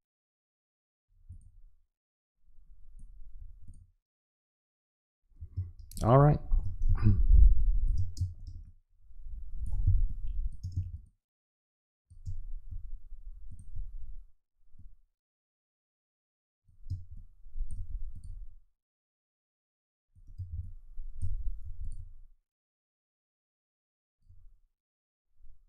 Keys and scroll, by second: 5.6 space, 6.9 space, 9.9 space, 16.9 space, 20.4 space.